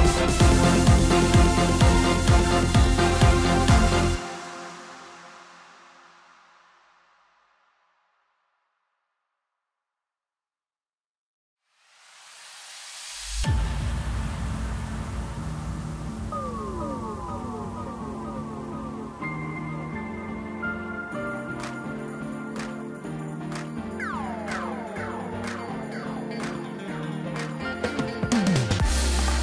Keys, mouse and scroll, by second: 0.1 KP_7, 1.4 e, 6.1 scroll up 2, 6.4 scroll down 2, 6.5-7.9 middle drag, 7.9 3, 8.3 click, 8.7 scroll up 1, 9.2-10.6 middle drag, 10.6 p, 11.9 Tab, 12.6 click, 15.2 click, 16.2 KP_1, 17.2-17.8 middle drag, 17.8 click, 18.5 KP_1, 19.1-19.8 scroll up 1, 19.8-20.1 scroll up 2, 20.4 ctrl+KP_2, 20.6-21.0 ctrl+KP_2, 21.6-22.3 scroll up 4, 22.7 g, 25.1 scroll up 3, 25.4-25.8 scroll down 5, 25.8-26.5 middle drag, 26.5-27.0 scroll down 3, 27.0-29.4 middle drag.